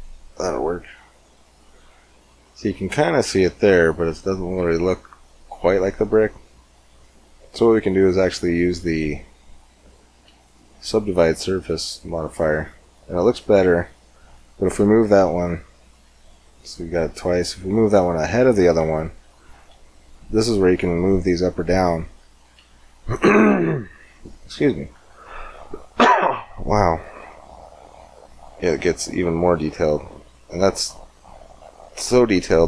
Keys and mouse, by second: 0.4-1.6 drag, 1.4-3.6 middle drag, 3.6 click, 4.2 right click, 5.6-7.1 drag, 7.1 middle click, 8.1-11.6 drag, 15.6-21.9 drag, 22.8-23.8 drag, 28.3 click, 28.4 middle click, 31.1 middle click.